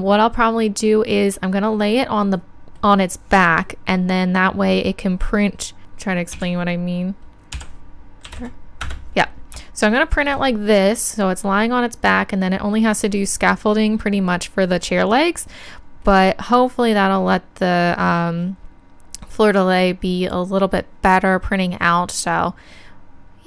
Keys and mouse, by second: 5.8 Tab, 5.8 KP_3, 6.3 a, 7.5 r.